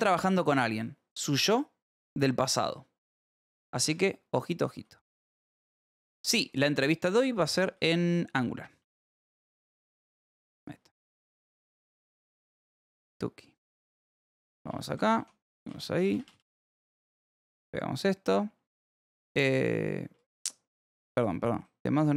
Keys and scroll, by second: 3.8 Escape, 4.7 p, 6.0-8.2 typing, 9.3 shift+5, 10.8 shift+4, 11.7 h, 12.8-16.2 typing, 17.5 p, 18.2 j, 20.1 k, 20.7 u, 21.5 j.